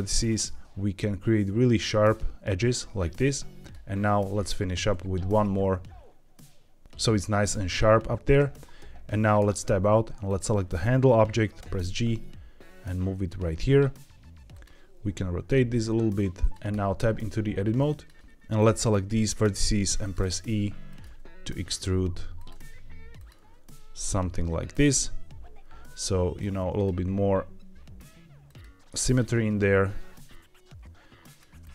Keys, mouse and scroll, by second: 2.5-2.9 scroll down 1, 3.5 click, 3.9-4.6 scroll down 1, 4.6 e, 4.8 z, 6.8 click, 9.3 Tab, 10.2 click, 11.5 g, 14.4 click, 14.9 r, 16.3 click, 16.6 Tab, 17.7 click, 18.2 ctrl+z, 18.5 click, 19.3-23.3 typing, 19.9 click, 20.8 click, 21.6 click, 22.3 click, 23.1 click, 24.6 click, 26.3 click, 26.9 g, 28.4 click, 28.9 click, 29.2 g, 31.2 click, 31.5 click.